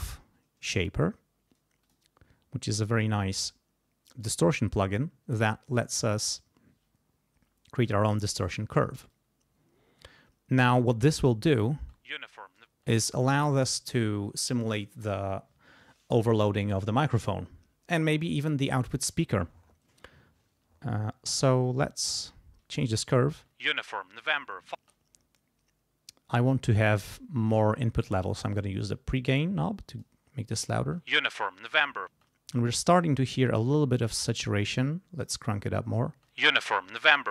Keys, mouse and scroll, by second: 0.0-0.2 typing, 1.8 click, 2.8 click, 4.2 click, 9.1-11.7 drag, 11.8 space, 12.7 space, 21.6-23.0 drag, 23.3 space, 24.8 space, 28.7-30.2 drag, 30.8 space, 32.1 space, 34.4 click, 36.1 space.